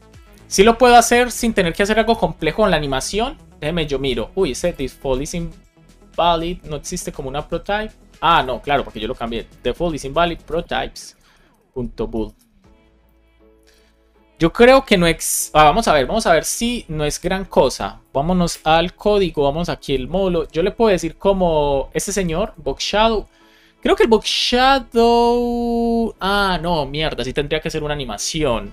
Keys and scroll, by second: 5.1 super+c, 9.1 Return, 9.5 super+v, 9.8 shift+;, 10.0 space, 10.2 shift+p, 11.0 Return, 12.1 BackSpace, 13.7 super+s, 14.8 alt+shift+f, 15.1 super+s, 18.4 shift+super+e, 23.9 super+Right.